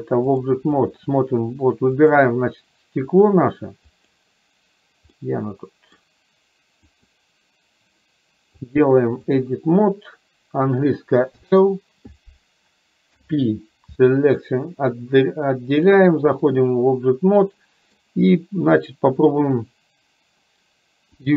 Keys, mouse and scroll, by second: 0.3 click, 2.2 click, 3.2 click, 4.0 click, 5.3 middle click, 7.0 click, 8.9 click, 11.4 l, 13.2 p, 15.9 click, 17.5 middle click.